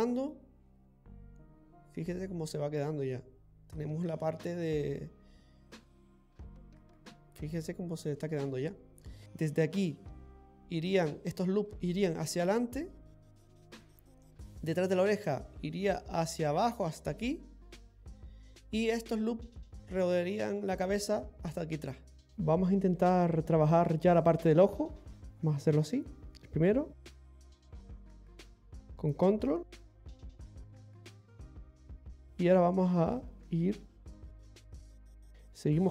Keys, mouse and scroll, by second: 1.8 click, 1.8 middle click, 7.2 click, 7.2 middle click, 7.2 scroll down 2, 9.2 middle click, 9.2 scroll down 2, 14.1 middle click, 18.2 middle click, 20.1 middle click, 20.6 scroll up 1, 22.3 middle click, 22.3 scroll down 1, 22.4 scroll up 2, 22.9 shift+middle click, 24.8-25.2 scroll up 1, 25.2 click, 30.1 ctrl+click, 33.2 click.